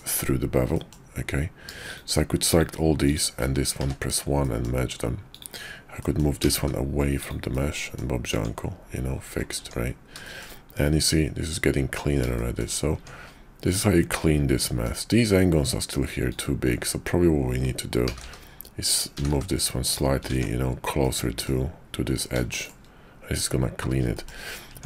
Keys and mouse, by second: 0.7 click, 1.8 shift+click, 2.5 shift+click, 3.0 shift+click, 3.8 1, 4.4 click, 5.3 click, 6.0 click, 6.4 g, 7.5 click, 8.3 Tab, 9.6 Tab, 10.2 shift+drag, 12.3 shift+click, 12.9 Tab, 13.6-14.9 drag, 18.0 g, 19.1 g, 20.3 Tab, 21.0-21.4 drag, 22.5 shift+drag, 24.1 shift+drag, 24.7 Tab.